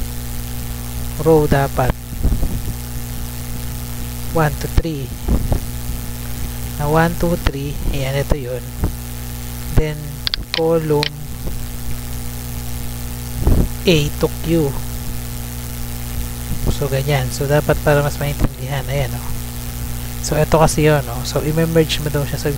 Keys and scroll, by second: 0.3 shift+r, 1.5-5.8 typing, 6.8 Right, 7.3 BackSpace, 11.1-14.7 typing, 15.8 Left, 16.2 Right, 17.2 shift+Right, 18.5 BackSpace.